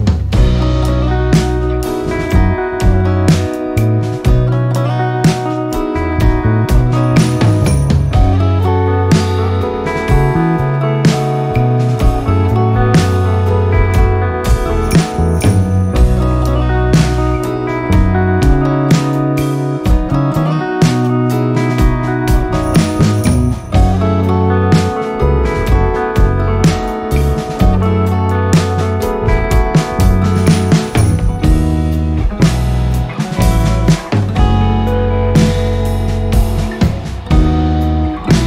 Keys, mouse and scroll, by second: 1.8 click, 2.3 v, 3.0 shift+click, 6.8 click, 16.4 click, 19.1 ctrl+scroll down 1, 21.4-23.2 drag, 23.2 ctrl+scroll up 1, 23.6 ctrl+scroll down 1, 24.3 ctrl+scroll up 1, 26.7 ctrl+scroll up 1, 26.9 ctrl+scroll down 1, 28.1 ctrl+scroll down 1, 28.7 ctrl+scroll up 1, 29.7 click, 36.8 r, 37.3-38.4 drag.